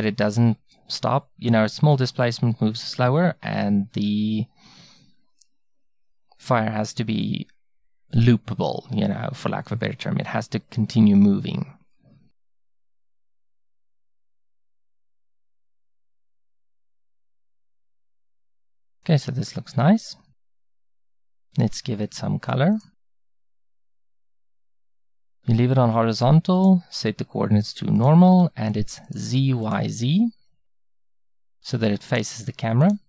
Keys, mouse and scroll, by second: 12.7-28.3 drag, 28.3-29.4 middle drag, 29.4-30.8 drag, 30.8 middle click, 31.6-33.0 drag.